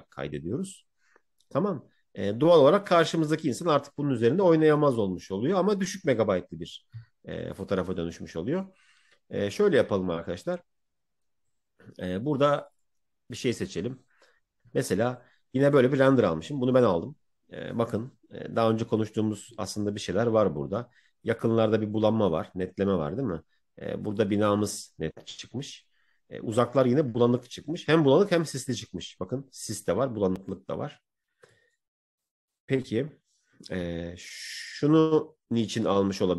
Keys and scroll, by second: 7.8 Right.